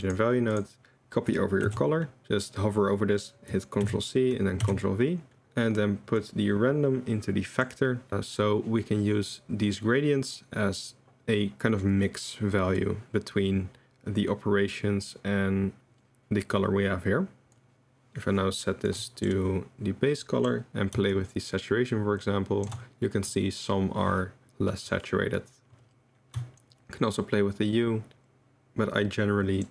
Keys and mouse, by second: 1.6 ctrl+c, 3.8 ctrl+c, 4.6 ctrl+v, 6.2 click, 6.5-7.7 drag, 17.5 drag, 18.9-19.3 drag, 20.2 click, 21.1 shift+click, 21.6 shift+middle click, 21.8 shift+click, 22.3 shift+middle click, 22.4 shift+click, 22.6 shift+middle click, 26.7 shift+click, 26.9 shift+click, 27.7 shift+click, 27.8 shift+click, 28.1-29.6 shift+middle drag.